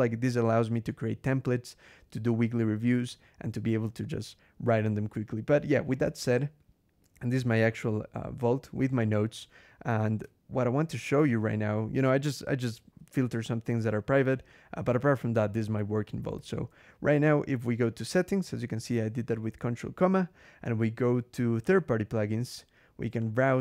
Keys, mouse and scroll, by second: 7.0 ctrl+g, 16.2 ctrl+,, 19.9 scroll down 2, 21.4 click, 23.0 click.